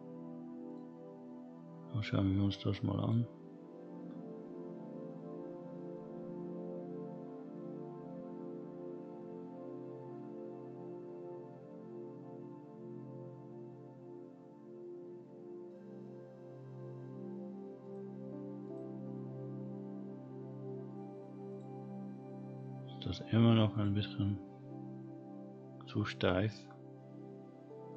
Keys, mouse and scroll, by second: 0.9 click, 3.0 click, 17.8 click, 18.6 click, 19.5-20.1 scroll down 3, 20.1-20.6 scroll up 1, 20.6 middle click, 21.1-21.5 scroll up 1, 21.5 click, 22.5-23.7 scroll down 2, 23.7 click, 24.2-26.0 scroll up 3, 26.7-27.9 scroll down 6.